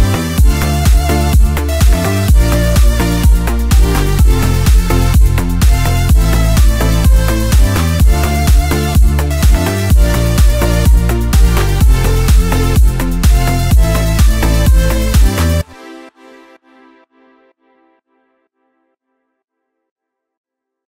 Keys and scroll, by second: 15.5 space.